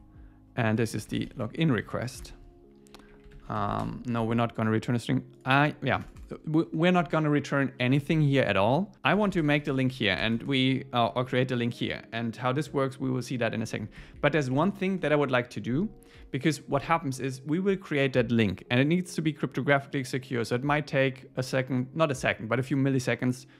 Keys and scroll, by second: 2.2 Tab, 3.1 Up, 3.4 super+Right, 3.6 shift+super+Left, 7.8 Down, 13.8 Escape, 14.1 Up, 15.0 Return.